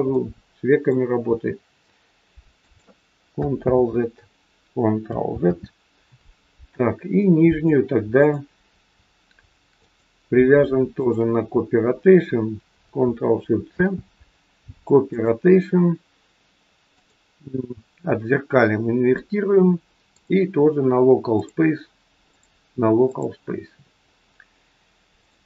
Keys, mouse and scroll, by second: 0.1 middle click, 1.2 r, 3.6 ctrl+z, 5.2 ctrl+z, 6.5-7.0 scroll up 3, 7.2 shift+middle click, 8.2 click, 9.8 click, 10.8 shift+click, 13.7 ctrl+shift+c, 16.8 click, 22.2 click.